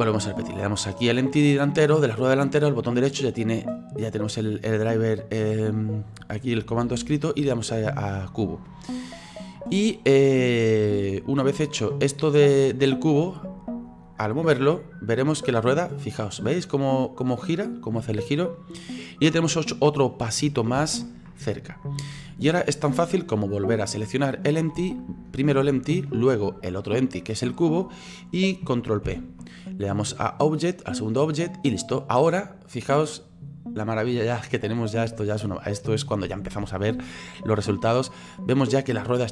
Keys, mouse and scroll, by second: 0.9 right click, 2.5-13.5 right drag, 14.0 scroll down 2, 14.3 middle click, 15.2-20.8 drag, 20.8 ctrl+z, 24.0 right click, 26.0 shift+right click, 29.1 ctrl+p, 32.1 right click, 32.8-39.3 drag.